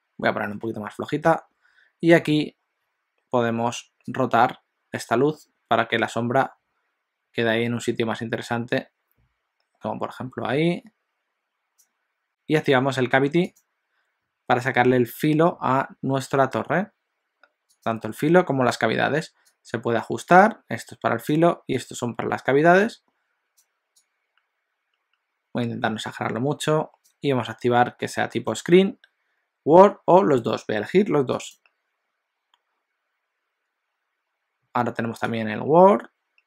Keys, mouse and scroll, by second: 17.6 click.